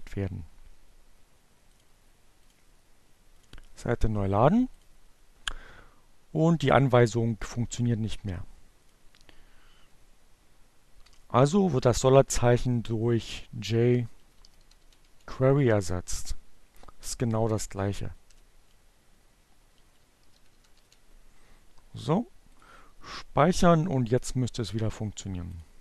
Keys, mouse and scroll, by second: 0.8 click, 1.9 click, 2.7 click, 4.1 click, 7.3 click, 9.4 Delete, 11.9-14.6 typing, 16.0 BackSpace, 17.3 j, 17.7 shift+q, 18.8-20.4 typing, 21.5 click, 22.6 click, 24.8 click.